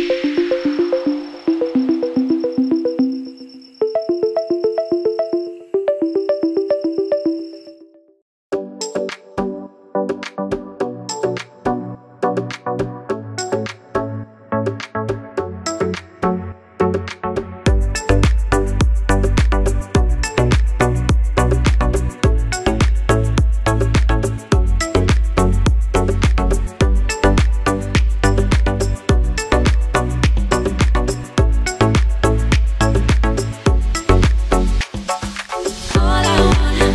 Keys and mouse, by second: 1.3 z, 1.9 click, 2.1-11.6 middle drag, 2.1 z, 2.7 shift+d, 3.0-6.5 drag, 3.8 KP_7, 4.3 KP_1, 5.0 KP_7, 5.9 r, 7.7 r, 8.4 r, 9.6 a, 9.6 s, 10.7 z, 11.1 z, 11.6 click, 12.6-23.9 middle drag, 12.6 s, 14.5 g, 17.9 click, 18.5 s, 19.9 g, 20.7 r, 21.1 g, 22.5-36.9 drag.